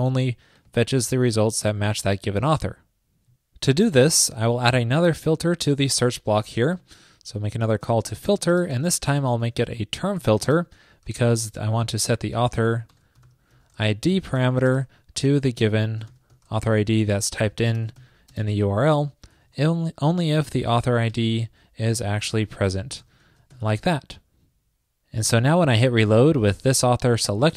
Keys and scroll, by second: 12.6 alt+BackSpace, 15.5 ctrl+p, 17.2 super+Right, 19.7 ctrl+p, 23.6 super+s.